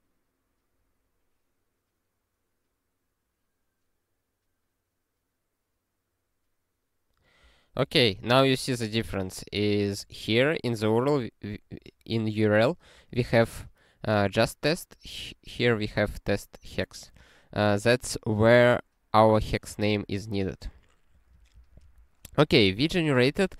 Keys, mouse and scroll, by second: 21.1 click, 21.5 ctrl+p, 21.8 ctrl+a.